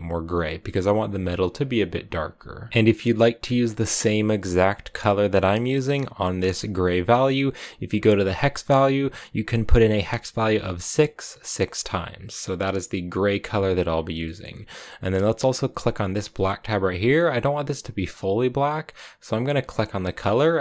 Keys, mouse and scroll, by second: 2.7-4.5 scroll up 1, 4.5-6.0 scroll up 1, 6.4 click, 13.5 click, 14.0-17.1 middle drag, 17.9-19.8 drag.